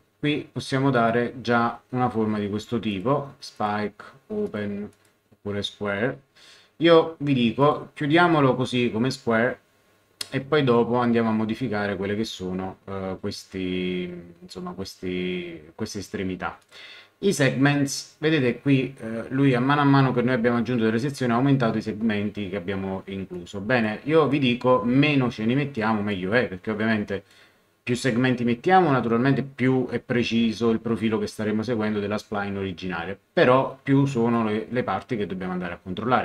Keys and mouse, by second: 0.9 click, 2.9 click, 7.6 click, 16.6 click, 23.3 click, 25.7 click, 27.0 click, 34.0 click.